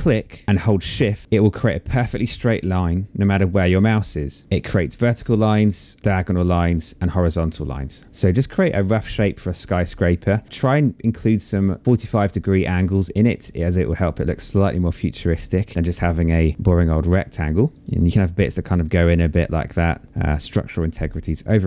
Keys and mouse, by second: 2.3 shift+click, 6.2 shift+click, 8.0 shift+click, 11.4 shift+click, 12.4 shift+click, 13.4 shift+click, 17.7 shift+click, 18.6 shift+click, 20.2 shift+click.